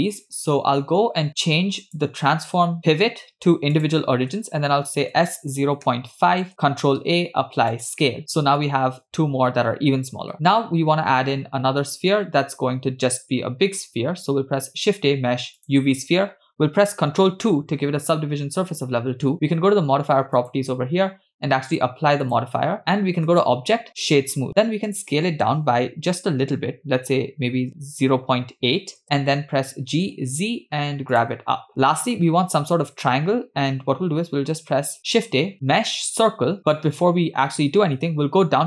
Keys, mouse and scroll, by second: 1.8-4.0 drag, 5.2 s, 7.0 ctrl+a, 13.8 shift+a, 17.6 ctrl+2, 20.4 click, 21.7-22.8 drag, 23.3 click, 24.9 s, 29.7 g, 31.4-31.9 scroll down 2, 35.0 shift+a.